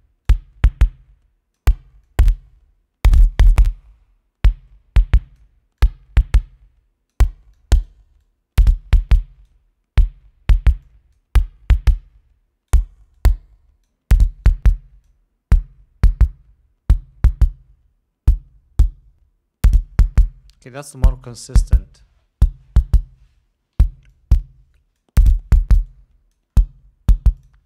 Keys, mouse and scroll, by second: 0.5-2.0 drag, 2.3-5.9 drag, 6.1-7.6 drag, 7.8-8.3 drag, 8.5-9.1 drag, 9.3 click, 11.1 click, 12.2-13.2 drag, 13.4-14.3 drag, 14.7-15.5 drag, 20.8 click, 24.4-25.5 drag, 26.2 click.